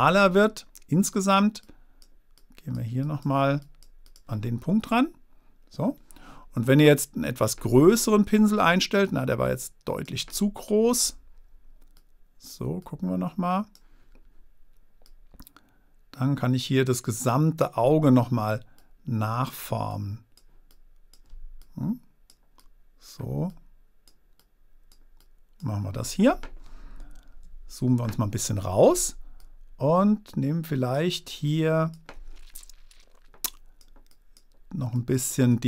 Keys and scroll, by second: 27.4 super+-.